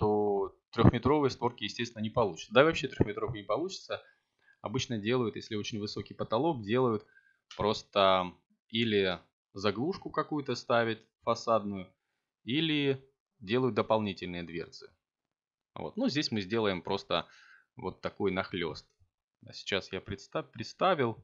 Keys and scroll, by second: 14.4 g.